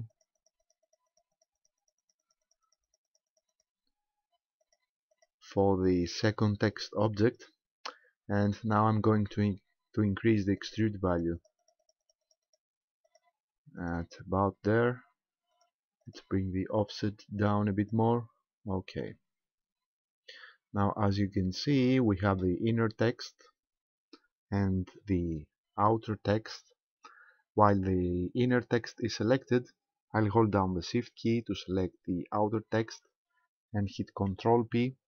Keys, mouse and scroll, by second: 0.1 click, 0.4 click, 0.6 click, 0.9 click, 1.1 click, 1.3 click, 1.6 click, 1.8 click, 2.0 click, 2.4 click, 2.7 click, 2.9 click, 3.1 click, 3.3 click, 3.5 click, 4.6 click, 5.1 click, 7.0-7.5 scroll up 2, 10.6 click, 11.1 click, 11.3 click, 11.6 click, 11.8 click, 12.1 click, 12.2 click, 12.4 click, 13.1 click, 13.8 click, 15.5 click, 16.1 click, 16.8 click, 17.4 click, 17.8 click, 18.7-19.1 scroll down 1, 19.1 middle click, 32.6 shift+right click.